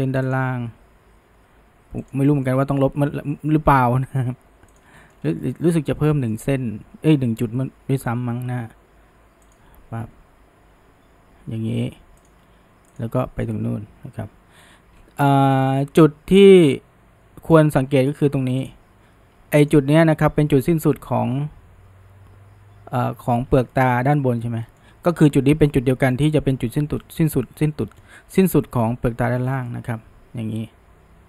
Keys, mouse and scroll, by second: 2.3 shift+middle click, 3.2 e, 5.0-6.7 shift+middle drag, 6.7 e, 10.9 e, 13.0 shift+drag, 13.2-14.3 shift+middle drag, 14.3 f, 14.6-15.7 scroll up 1, 15.7-18.7 middle drag, 18.7 click, 19.7 click, 23.6 scroll down 1, 23.7-24.9 middle drag, 24.9-27.0 scroll up 1, 27.5-28.3 middle drag, 28.3-29.5 scroll up 1, 29.5 scroll up 1, 29.7 scroll down 3, 29.7-31.2 middle drag.